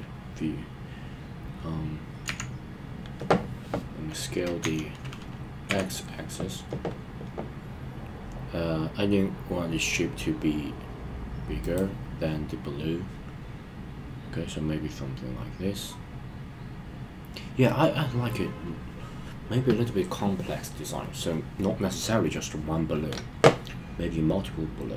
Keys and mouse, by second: 2.2 KP_1, 4.6 s, 5.7 x, 11.6 click.